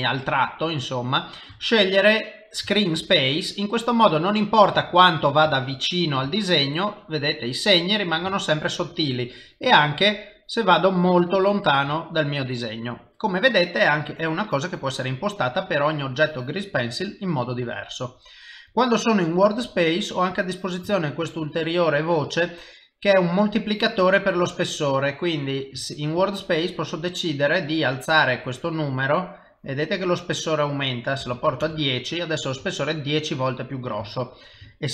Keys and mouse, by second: 0.5 click, 0.8 middle click, 2.8 ctrl+middle click, 3.6 middle click, 4.8 shift+middle click, 5.6 ctrl+middle click, 6.4 shift+middle click, 8.5 ctrl+middle click, 9.0 ctrl+middle click, 10.0 ctrl+middle click, 10.4 ctrl+middle click, 10.9 ctrl+middle click, 11.4 ctrl+middle click, 12.0 middle click, 15.2 middle click, 17.2 middle click, 18.7 click, 21.0 shift+middle click, 24.6 middle click, 29.0 click, 29.5 click, 30.0 click, 30.8 click, 32.8 ctrl+middle click, 34.1 shift+middle click, 34.8 ctrl+middle click.